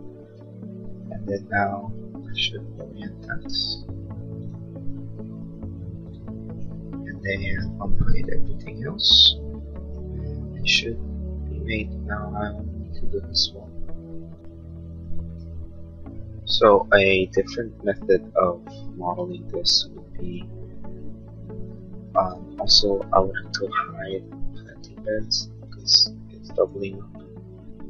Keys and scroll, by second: 8.5 shift+u, 18.9 a, 22.4 Escape.